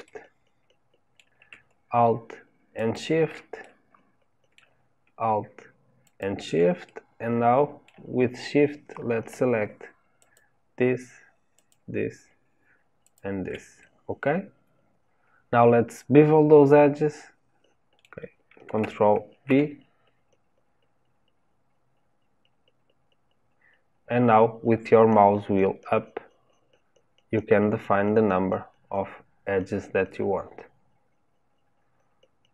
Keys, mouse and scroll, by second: 0.0-2.7 middle drag, 2.7 alt+shift+click, 3.6-6.0 middle drag, 6.0 alt+shift+click, 6.8-10.2 middle drag, 10.2 shift+click, 11.5 shift+click, 13.0 shift+click, 13.8-19.3 middle drag, 19.3 ctrl+b.